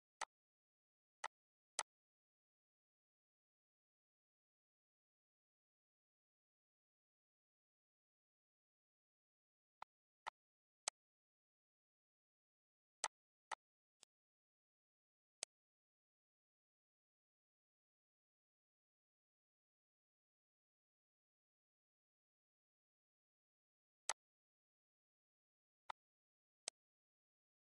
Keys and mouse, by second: 1.0 click, 9.4 click, 10.6 click, 12.8 click, 15.1 click, 15.5 ctrl+s, 20.3 3, 21.3-23.0 typing, 23.8 click, 25.7 click, 26.5 click.